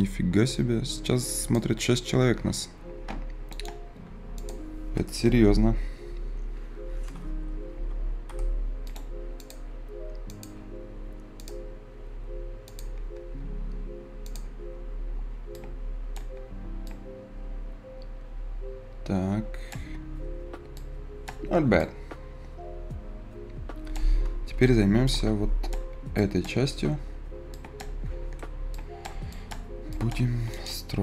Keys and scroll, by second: 14.3 Return.